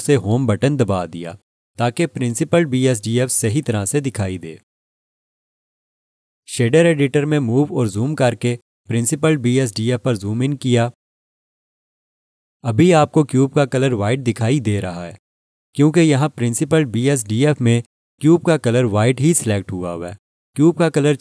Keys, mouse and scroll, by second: 7.7-9.0 scroll up 1, 9.1 alt+shift+click, 10.2-11.1 scroll up 1, 11.2 alt+shift+click.